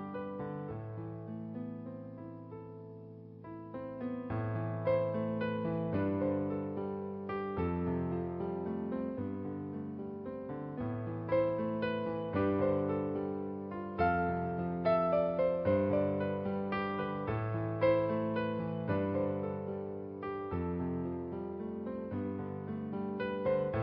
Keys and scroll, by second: 9.1 ctrl+alt+g, 17.7 b, 18.7-23.4 typing.